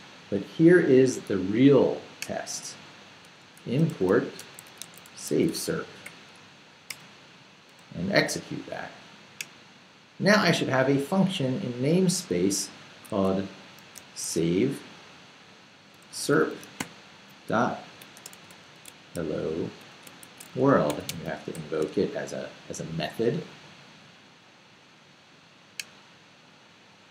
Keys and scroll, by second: 3.2-6.5 typing, 6.9 Return, 7.7 BackSpace, 12.7-14.5 typing, 15.7-22.0 typing.